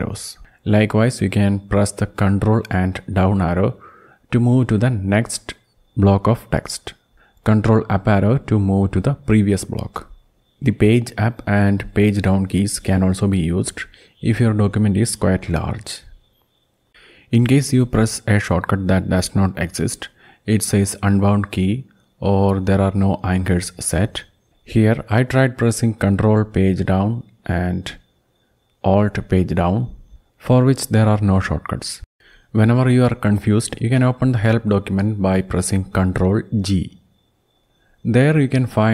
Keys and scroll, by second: 1.2 ctrl+Down, 1.8 ctrl+Down, 2.4 ctrl+Down, 2.9 ctrl+Down, 3.6 ctrl+Down, 4.8 ctrl+Up, 5.1 ctrl+Up, 5.5 ctrl+Up, 6.2 ctrl+Up, 7.6 ctrl+Up, 13.3 Page_Down, 14.1 Page_Down, 14.7 Page_Down, 15.4 Page_Down, 16.7 Page_Up, 17.0 Page_Up, 17.3 Page_Up, 17.6 Page_Up, 18.9 ctrl+Page_Down, 23.7 alt+Page_Down.